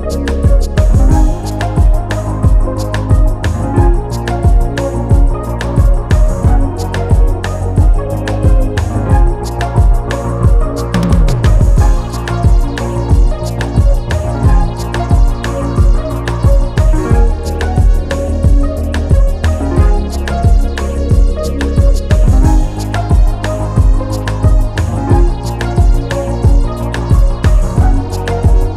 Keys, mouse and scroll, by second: 1.2 click, 6.1 scroll down 1, 7.5 click, 8.0 KP_1, 8.3 Return, 9.6 scroll up 1, 10.6 click, 12.8 click, 15.3 click, 16.3 click, 21.6 scroll down 1, 22.1 click, 25.2 click, 27.7 click.